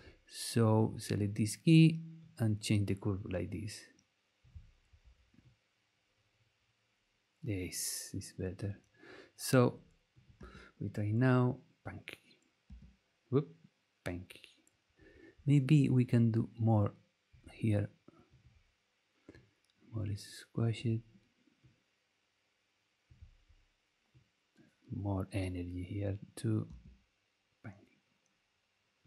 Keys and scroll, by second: 10.3 space, 12.6 space, 26.6 space.